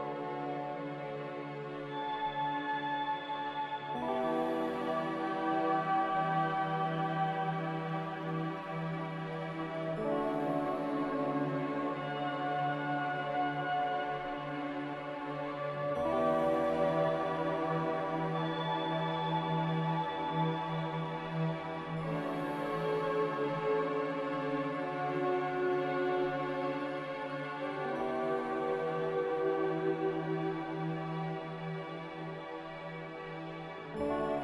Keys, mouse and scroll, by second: 1.7 ctrl+z, 2.0 ctrl+z, 7.6 ctrl+z, 15.1-16.0 typing.